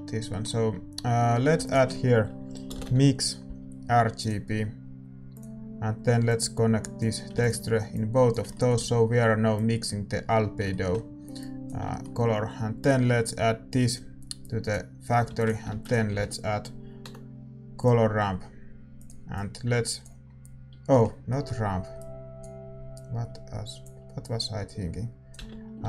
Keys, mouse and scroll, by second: 7.4 ctrl+s, 7.4-25.8 drag.